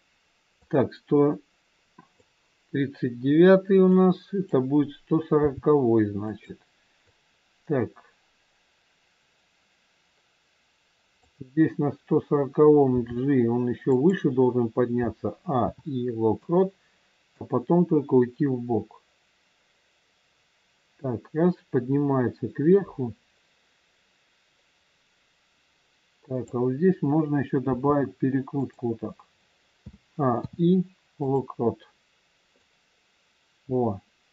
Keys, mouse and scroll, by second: 0.6 click, 0.6-1.9 scroll down 1, 3.9 click, 5.4 g, 7.0 click, 13.0 g, 15.0 a, 15.6 i, 17.2 click, 27.7 r, 29.7 a, 30.2 i, 32.6 click.